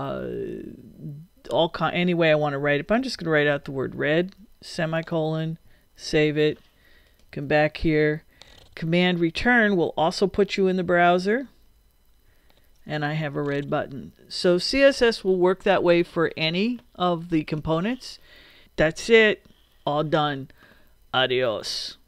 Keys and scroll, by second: 2.8-4.7 typing, 5.6 super+;, 6.0 super+s, 11.4 super+Return.